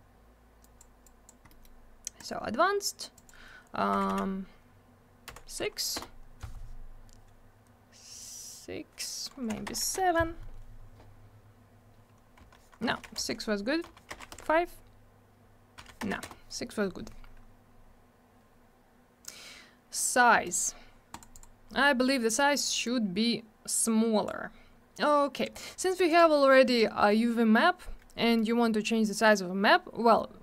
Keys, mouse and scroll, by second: 0.6 click, 0.8 click, 1.0 click, 1.5 middle click, 1.6 middle click, 2.1 click, 2.2 click, 3.1 click, 3.2 click, 3.9 0, 5.2 6, 5.9 Return, 9.6 BackSpace, 9.8 7, 9.9 Return, 12.4 Right, 12.8 BackSpace, 13.0 6, 13.1 Return, 13.8 Right, 14.1 BackSpace, 14.2 5, 14.3 Return, 15.7 Right, 16.0 BackSpace, 16.1 6, 16.2 Return, 19.9 middle click, 20.1 middle click, 20.4 right click, 20.5 right click, 21.1 click, 21.2 click, 21.3 click, 21.4 click, 22.8 click, 26.0 click, 26.1 click, 28.2 middle click, 28.3 middle click, 29.1 click, 29.2 click.